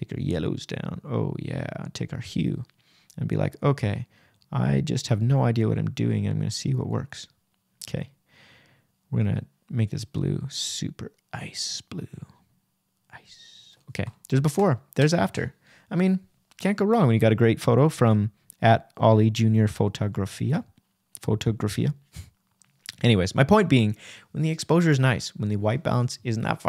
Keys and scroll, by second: 6.5 \, 16.7 super+z, 17.1 \, 22.8 \.